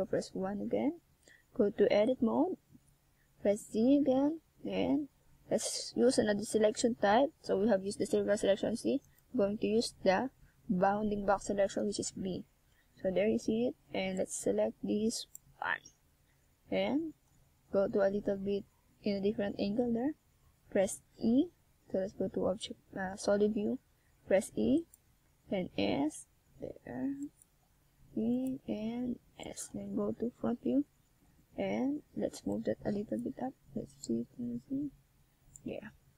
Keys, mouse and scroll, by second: 0.6 scroll up 2, 1.3 shift+scroll down 1, 2.4 shift+a, 9.2-10.0 scroll up 1, 12.4 KP_7, 14.8 Tab, 16.3 click, 19.4 click, 20.9 right click, 21.6 right click, 22.1 right click, 22.8 right click, 23.8 shift+right click, 24.0 shift+right click, 24.6 right click, 24.8 shift+right click, 26.1 right click, 27.5 c.